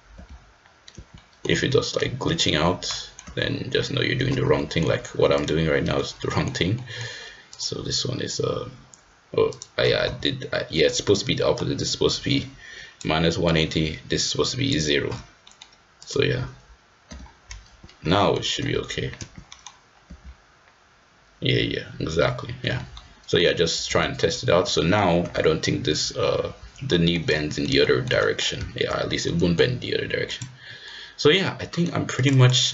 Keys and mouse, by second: 0.3 g, 1.2 middle click, 1.6 g, 2.9 middle drag, 3.3 g, 4.6 middle drag, 6.8 middle drag, 9.5-10.7 drag, 11.6-13.1 drag, 13.6-14.7 drag, 15.4 middle drag, 16.0-16.9 drag, 17.1 g, 18.1 middle drag, 18.6 g, 19.5 middle drag, 20.1 g, 22.9-23.4 middle drag, 23.9 g, 24.8 middle click, 25.3 g, 26.9 middle drag, 27.4 middle drag, 27.8 shift+middle drag, 28.2 middle drag, 29.3 middle click, 30.4-31.5 drag, 31.6 middle drag, 32.3-32.7 drag.